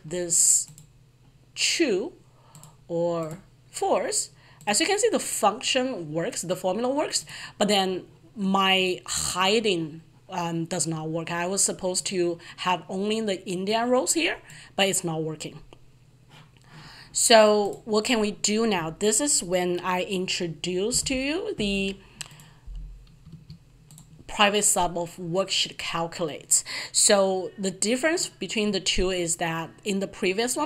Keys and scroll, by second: 20.9 ctrl+v, 21.0 alt+F11.